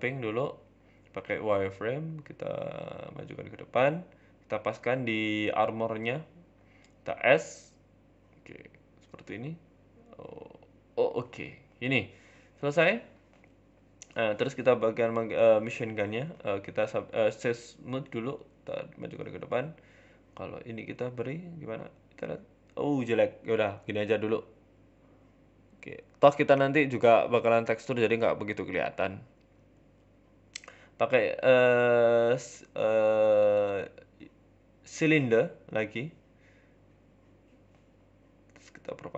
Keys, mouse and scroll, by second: 0.0 Tab, 0.2 shift+middle click, 0.5 z, 8.2 middle click, 8.6 z, 9.4 scroll down 2, 9.5 middle click, 10.0 ctrl+z, 10.2 ctrl+z, 10.2 ctrl+z, 10.8 ctrl+shift+z, 11.2-11.8 scroll down 2, 11.4 middle click, 12.0 middle click, 12.5 scroll up 3, 12.7 Tab, 13.0 middle click, 13.0 middle click, 13.3-13.7 scroll down 2, 13.5 middle click, 13.8-14.6 scroll up 1, 14.6-15.0 scroll up 2, 15.1 click, 16.0 middle click, 16.3-16.6 scroll up 4, 16.4 Tab, 16.6 middle click, 17.2 ctrl+r, 19.5 Tab, 19.9 middle click, 20.4 Tab, 21.0 ctrl+r, 22.4 Tab, 23.0 ctrl+z, 23.3 ctrl+z, 23.6 Tab, 23.8 scroll down 7, 24.0 middle click, 24.3 scroll up 4, 24.5 middle click, 24.7 shift+a, 26.5 shift+s, 27.2 shift+a, 28.6 KP_3, 29.2 KP_1, 29.7 r, 30.6 s, 31.4-31.8 scroll up 3, 31.8 g, 32.4 s, 33.7 shift+middle click, 34.0 Tab, 34.1 click, 35.2 click, 35.9 g, 37.4 shift+middle click, 37.8 e, 38.0 s, 38.9 shift+click.